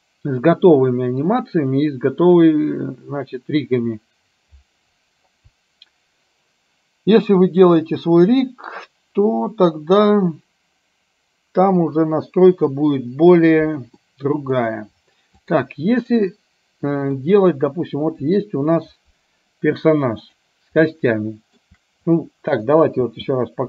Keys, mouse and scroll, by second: 14.1-14.6 middle drag, 15.6 click, 16.1-17.2 middle drag, 18.2 KP_3, 20.3 click, 21.1-21.6 shift+middle drag, 22.2-22.7 middle drag, 23.1 space.